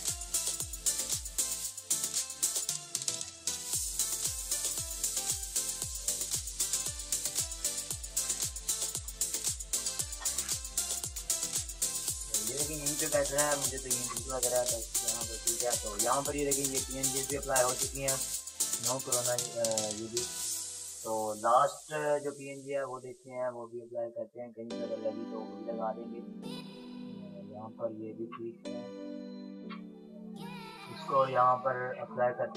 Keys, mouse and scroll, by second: 0.0-0.9 typing, 0.4 click, 2.0-3.7 typing, 3.6 click, 4.7-8.0 drag, 8.0 ctrl+z, 10.0 Delete, 10.9 ctrl+z, 12.3 ctrl+-, 14.7 ctrl+t, 15.4-16.7 shift+drag, 16.7 Return, 17.0 ctrl+-, 18.4 click, 22.5-27.5 drag, 27.5 Return, 28.0 ctrl+], 28.9 ctrl+r, 30.2-32.3 shift+drag.